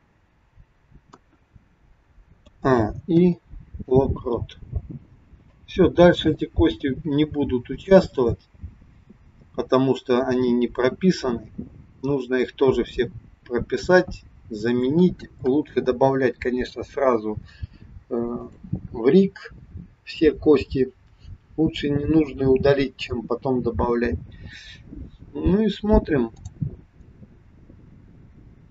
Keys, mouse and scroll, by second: 1.0 KP_1, 2.4 a, 3.2 i, 5.5 click, 14.7-15.2 scroll down 2, 15.4 KP_1, 16.4-17.7 scroll down 1, 18.4 click, 24.0-25.0 scroll up 1, 26.4 click, 27.3 click.